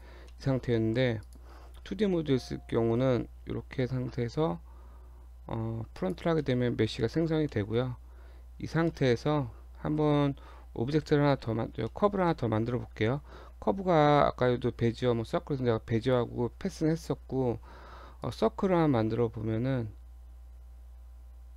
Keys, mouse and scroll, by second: 0.3 middle click, 1.2 click, 6.4 middle click, 6.7 Tab, 7.0 middle click, 7.2-7.5 scroll down 1, 7.5 middle click, 8.0 Tab, 8.3 scroll up 1, 8.6 Tab, 8.9 middle click, 9.9 KP_1, 11.0 KP_7, 11.9 shift+middle click, 13.2 shift+a.